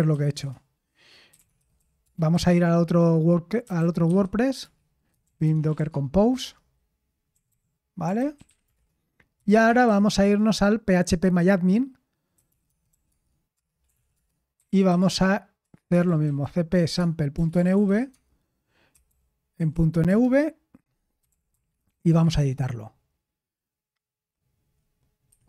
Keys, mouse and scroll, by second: 0.0-10.8 typing, 12.2-22.7 typing.